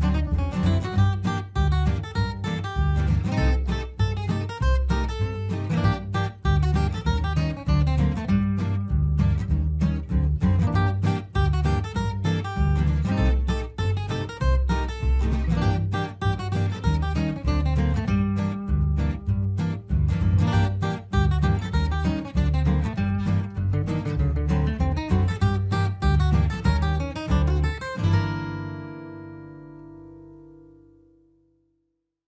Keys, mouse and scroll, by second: 6.3 F3, 7.1 Escape, 7.3-18.1 alt+drag, 18.1 ctrl+g, 18.5-22.9 drag, 23.2 F4, 23.8 click, 23.9-27.5 drag, 27.5 F2, 27.6-32.2 drag.